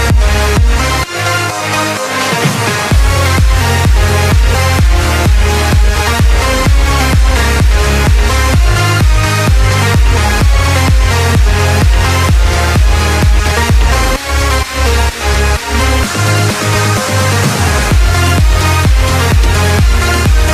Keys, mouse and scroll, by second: 8.5 click, 9.1 scroll down 3, 9.4-12.0 middle drag, 12.0 click, 12.3-12.7 scroll down 4, 12.7-16.2 middle drag, 16.2 KP_1, 16.9-18.8 scroll up 7, 18.8 shift+d.